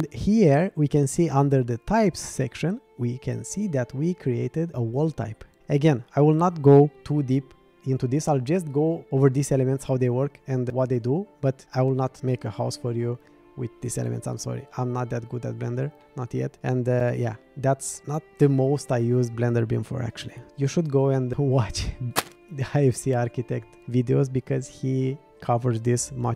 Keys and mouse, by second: 11.6 middle click, 16.0 middle click, 17.9-18.3 middle drag.